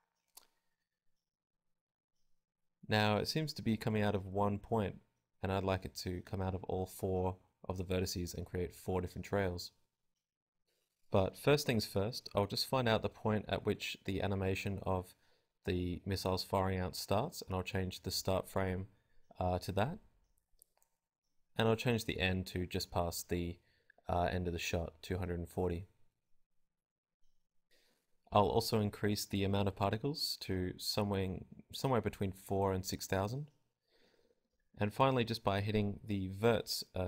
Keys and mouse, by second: 4.2 alt+a, 5.2-7.2 drag, 28.2 click, 29.2-30.2 drag, 31.0 click, 33.5 alt+a, 35.7 alt+a, 36.1-37.0 drag.